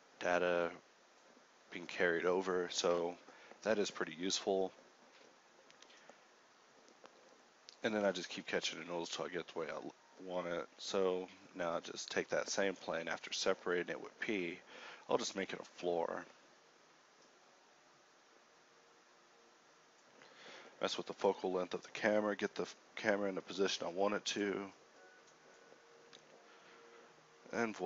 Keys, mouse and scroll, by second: 0.0-5.1 typing, 2.4 Tab, 3.5 ctrl+Tab, 5.8 Tab, 6.2 KP_1, 6.5 a, 7.4 Tab, 8.4 p, 8.7 Tab, 9.2 Tab, 9.4 s, 10.2 s, 11.0 Tab, 13.6 KP_5, 15.6 shift+a, 16.8 ctrl+alt+KP_0, 19.7 n, 25.3-27.8 typing, 27.4 Tab.